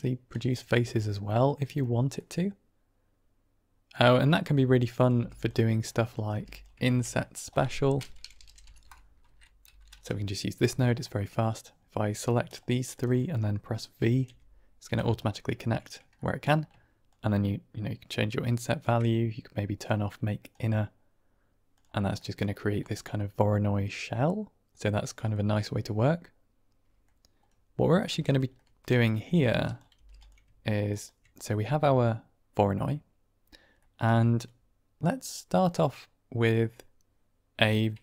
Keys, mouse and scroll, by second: 1.2 middle drag, 2.1-3.0 middle drag, 3.3-4.1 middle drag, 4.9 click, 5.0 g, 5.7 middle click, 6.1 click, 6.2 g, 6.7 shift+a, 12.4 shift+click, 14.2 v, 15.1 ctrl+right click, 16.1 middle click, 17.0-18.7 shift+drag, 19.7 click, 20.5 middle click, 21.6 click, 22.1 middle drag, 22.8-24.3 middle drag, 24.3-24.7 drag, 24.5 middle click, 25.9-26.8 middle drag, 26.8 click, 26.8 right click, 27.7 drag, 28.0 typing, 28.4 click, 29.6 click, 29.8 g, 30.8 ctrl+right click, 31.5 middle click, 33.8 middle click, 35.1-36.6 drag.